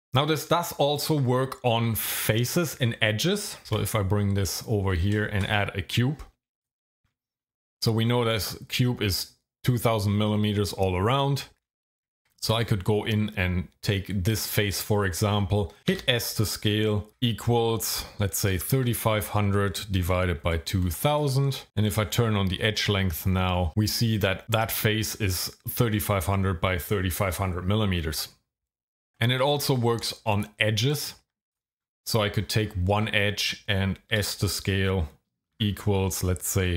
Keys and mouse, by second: 3.7 g, 4.6 click, 5.3 shift+a, 12.0 Tab, 15.9 s, 17.1 =, 18.5 KP_3, 18.7 KP_5, 19.2 KP_0, 19.3 KP_0, 20.0 KP_Divide, 20.4-21.9 typing, 21.7 KP_Enter, 31.1 Tab, 34.1 s, 35.5 =.